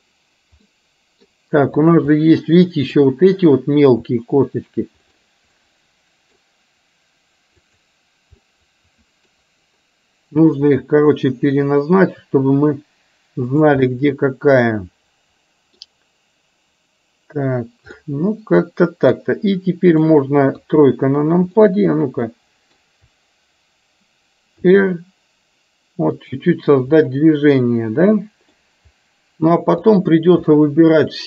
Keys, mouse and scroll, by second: 0.7 middle click, 1.9 click, 2.1-3.0 middle drag, 5.6-6.5 middle drag, 8.5-9.5 middle drag, 11.3 r, 13.9-15.9 middle drag, 18.1-20.1 middle drag, 20.6 KP_3, 21.6-22.9 middle drag, 25.1 r, 27.1-28.6 middle drag, 30.5-31.2 middle drag.